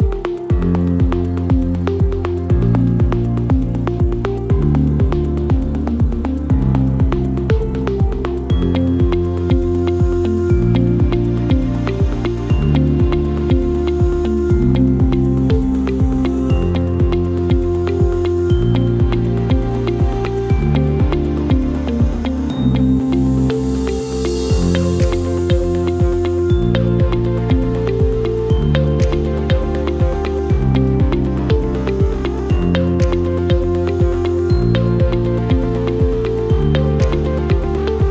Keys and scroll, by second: 7.2 Delete.